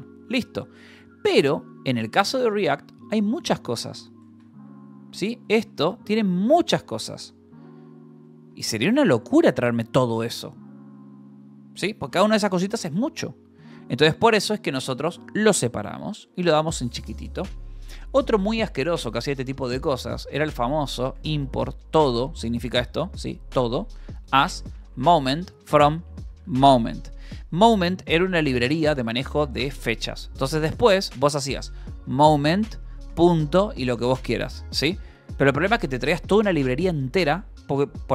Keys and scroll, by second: 2.3-9.0 typing, 14.0 u, 15.1-16.2 typing, 16.8 Escape, 17.9 o, 19.7-21.5 typing, 22.6-28.0 typing, 26.8 Escape, 28.4 Escape, 29.3-32.9 typing, 31.3 Return, 35.0 BackSpace, 38.0 Escape.